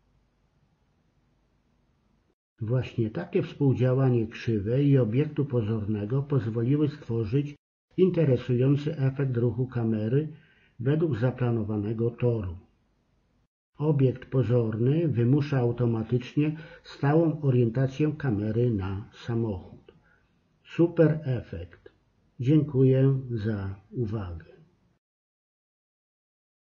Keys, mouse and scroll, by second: 1.4-9.0 drag, 9.0 KP_7, 11.1 click, 11.8 click, 14.3 click, 16.3 KP_0, 17.3 click.